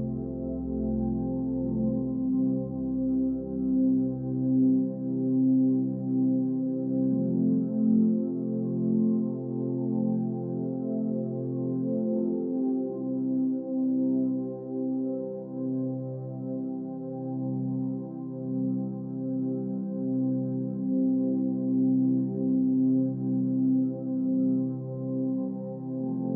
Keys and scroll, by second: 17.4 Delete.